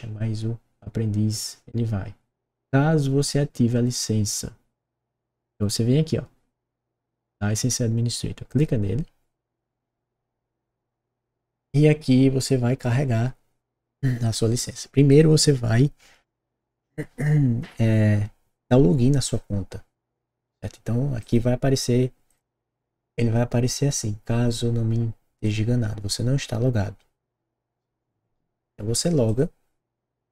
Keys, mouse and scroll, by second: 8.4 click, 15.0 click, 21.1 click, 22.2 click, 25.4 click, 29.2 click.